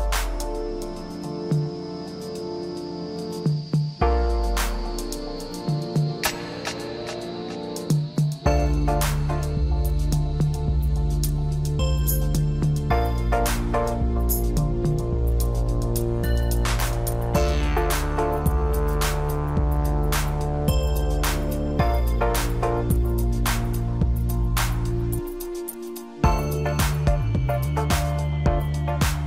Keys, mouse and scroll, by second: 0.2-1.1 scroll down 1, 1.1-2.5 scroll down 1, 2.5-4.4 scroll up 1, 4.4 Tab, 5.4 click, 6.3 l, 9.3 3, 10.3 Delete, 12.0 Tab, 13.5 ctrl+a, 15.2 click, 16.6-17.4 drag, 17.4 scroll down 1, 17.7-19.6 middle drag, 19.6 KP_1, 21.1 click, 21.4 scroll up 2, 21.6 scroll down 2, 21.8-24.0 middle drag, 24.0 KP_1, 26.2 click, 27.4-29.2 drag.